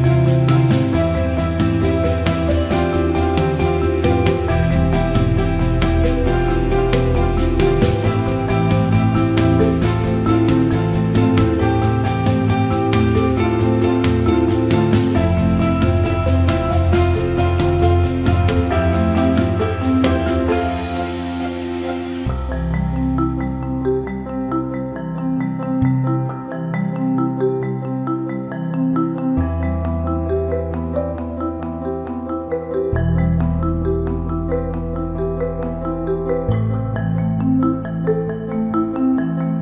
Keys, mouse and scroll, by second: 1.0 Tab, 3.1 click, 4.8 shift+click, 6.9 click, 10.9-12.8 drag, 15.0 click, 19.9 ctrl+i, 21.0 click, 22.8-27.3 drag, 28.3-33.1 drag, 34.6 click, 35.5 alt+middle click, 35.8 alt+shift+middle click, 36.2 alt+middle click, 37.0 alt+shift+middle click, 37.3 alt+middle click, 37.7 alt+shift+middle click, 38.1 ctrl+alt+middle click.